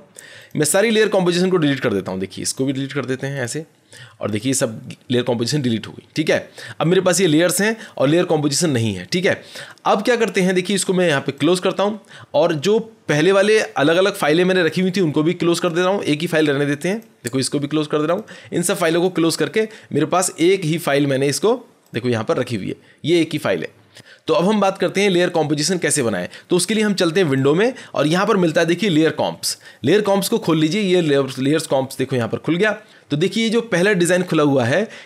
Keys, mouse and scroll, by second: 0.4 click, 1.8 click, 2.5 click, 3.4 click, 4.4 click, 11.4 click, 15.6 click, 16.9 click, 18.1 click, 19.0 click, 21.9 click, 27.3 click, 30.0 click.